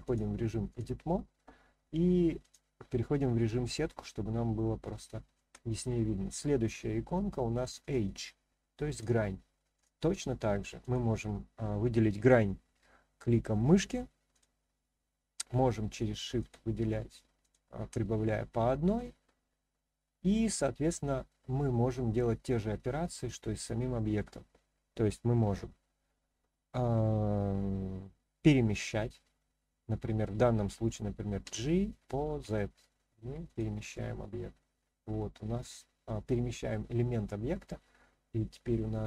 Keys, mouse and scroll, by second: 0.0-0.8 drag, 2.4 click, 3.9-5.4 shift+middle drag, 7.8 click, 8.9 click, 9.7 click, 10.8 click, 14.3 shift+click, 16.4 shift+click, 17.4 shift+click, 18.2-20.9 middle drag, 32.4 z, 33.4 click, 33.9-36.7 middle drag, 37.0 scroll down 1, 37.6-39.0 middle drag, 37.6-38.6 scroll down 1.